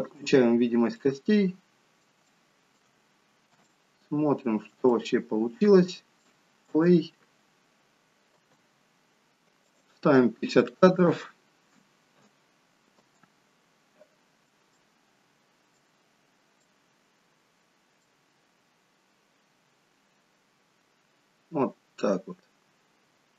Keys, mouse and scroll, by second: 0.2 click, 1.0 middle click, 2.4 shift+middle click, 3.0-3.8 scroll down 4, 3.8 shift+middle click, 5.1 middle click, 6.7 space, 9.7 click, 9.7 space, 13.1 space, 14.9 middle click.